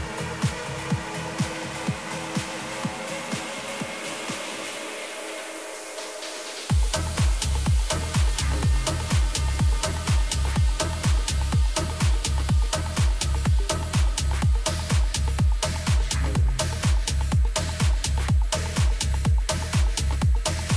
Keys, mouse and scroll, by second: 1.1-3.0 middle drag, 3.3-5.2 drag, 3.8 a, 4.2 a, 4.8-7.3 right drag, 7.3-9.2 middle drag, 10.7-13.1 middle drag, 14.4-16.4 middle drag, 20.6-20.7 middle drag.